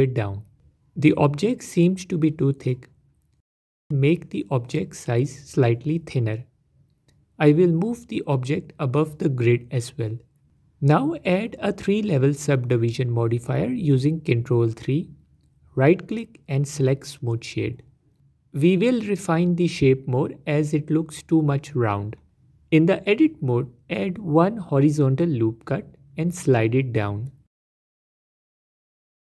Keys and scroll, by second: 4.1 Tab, 12.3 ctrl+3, 19.9 Tab, 24.7 ctrl+r.